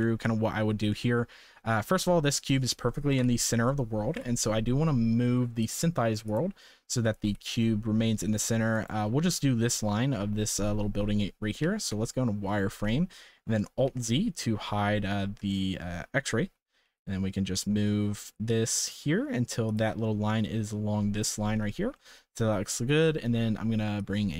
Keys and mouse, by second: 0.0-0.6 shift+middle drag, 0.9 shift+middle click, 3.1 KP_7, 4.1 KP_0, 6.2 click, 7.2 g, 11.6 z, 12.9 shift+middle click, 13.8 alt+z, 14.3-14.6 shift+middle drag, 15.4-15.7 shift+middle drag, 16.4 g, 22.0 shift+middle click, 23.9-24.3 drag.